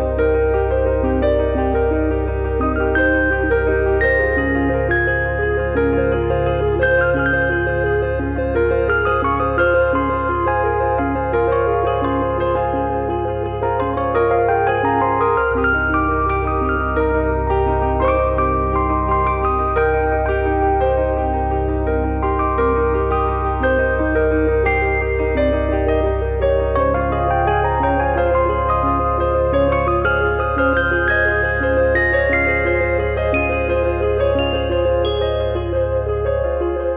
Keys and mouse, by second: 1.6 click, 4.1 click, 5.1 e, 5.7 click, 7.1 click, 8.9 click, 9.4 click, 10.2 click, 11.5 click, 12.9 e, 14.3 click, 14.9 click, 15.7 click, 16.4 middle click, 18.5 e, 19.0 e, 19.6 ctrl+click, 20.0 f, 20.4 KP_3, 21.9 click, 22.4 e, 23.9 click, 24.5 click, 25.6 click, 27.9 click, 28.3 f, 28.5 shift+middle click, 28.8 middle click, 29.1 shift+middle click, 29.9 click, 30.9 e, 32.5 click, 33.7 click, 34.6 click, 36.7 click.